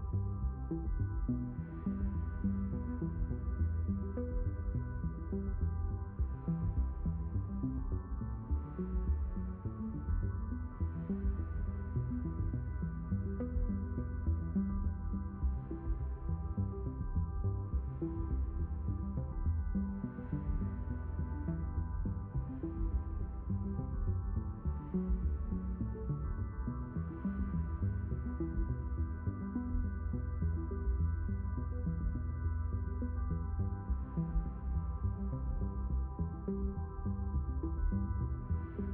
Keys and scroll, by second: 4.0 b.